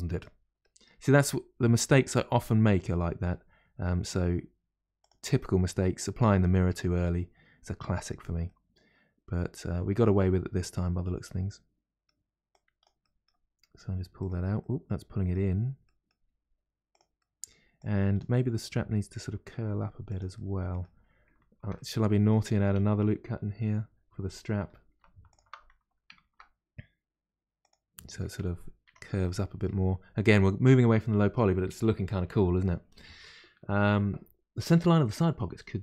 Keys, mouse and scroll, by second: 1.2 g, 5.3-8.3 middle drag, 8.4-11.4 middle drag, 12.5 click, 13.0 middle click, 13.6 g, 13.6 g, 14.6-16.3 middle drag, 16.3 g, 17.2 middle click, 17.7 click, 18.3 middle click, 19.0 g, 20.3-24.6 middle drag, 24.6 2, 25.3 alt+click, 26.2 ctrl+b, 27.9 middle click, 28.8 Tab, 29.2-32.2 middle drag.